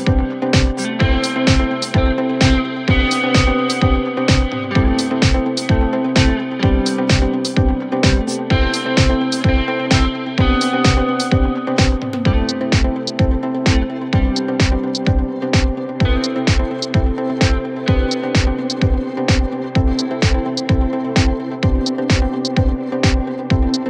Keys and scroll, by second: 20.2 ctrl+z.